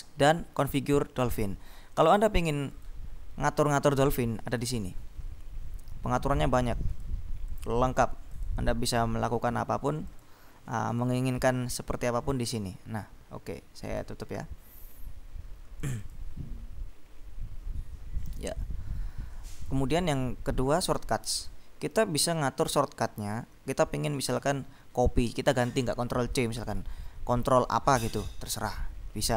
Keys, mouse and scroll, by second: 2.2 click, 2.9 click, 4.6 click, 6.2-7.7 drag, 8.5 click, 10.3 click, 11.0 click, 12.3 click, 14.0 click, 15.9 click, 19.7 click, 21.4 click, 23.9-24.7 scroll down 2, 28.8-29.3 scroll down 3.